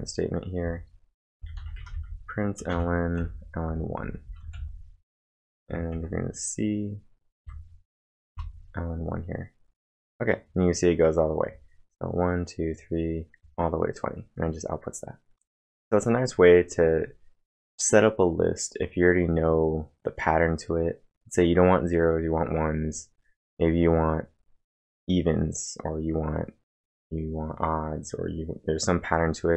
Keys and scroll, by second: 1.3-2.7 typing, 4.4 space, 4.5 f, 6.0 ctrl+`, 7.4 Up, 8.3 Return.